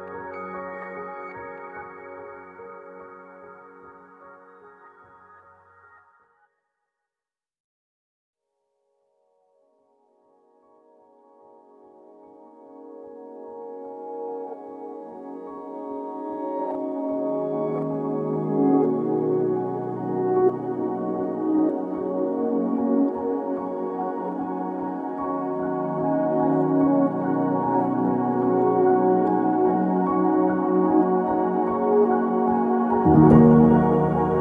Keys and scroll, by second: 8.4 ctrl+z, 10.4 ctrl+z, 14.7-15.4 typing, 21.1-23.2 typing, 24.2 Escape, 24.6 Escape, 25.3 typing, 25.3 Return.